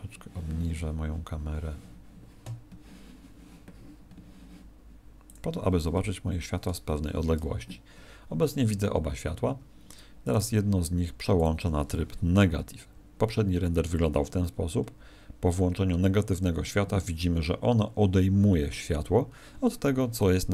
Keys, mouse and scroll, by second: 5.2 click, 9.4 Escape, 10.2 right click, 11.3 click.